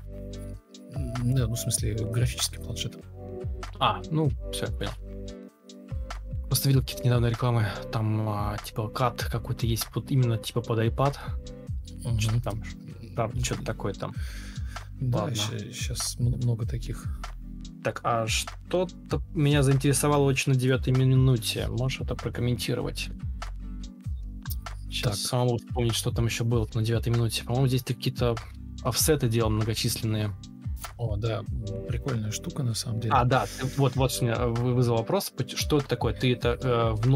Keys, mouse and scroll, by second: 23.7-24.4 typing, 25.1 ctrl+space, 27.3 ctrl+m, 28.5 Escape, 29.6 alt+scroll up 1, 30.0 ctrl+alt+c, 30.3 alt+click, 31.3 ctrl+v, 31.3 space, 31.9 alt+space, 31.9 alt+click, 32.5-34.4 typing, 37.0 shift+r.